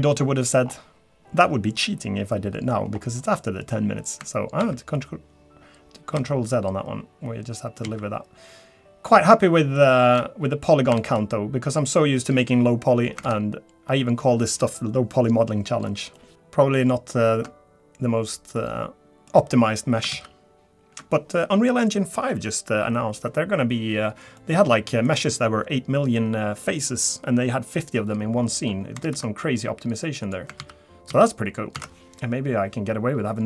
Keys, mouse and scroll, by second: 0.6-2.0 scroll down 2, 2.0-2.5 scroll down 1, 2.5 middle click, 2.7-3.2 scroll up 4, 3.2 middle click, 5.8 ctrl+z, 7.3 ctrl+z, 8.9 ctrl+z, 12.0 ctrl+z, 14.4 ctrl+z, 14.4 middle click, 16.2 middle click, 16.3 ctrl+z, 16.3 scroll up 2, 17.9 scroll down 1, 18.6 middle click, 19.5-20.0 scroll down 1, 21.2 ctrl+z, 24.4 middle click, 25.1 scroll down 2, 28.3-28.8 scroll up 8, 30.2 ctrl+z, 30.2 click, 32.4 ctrl+z.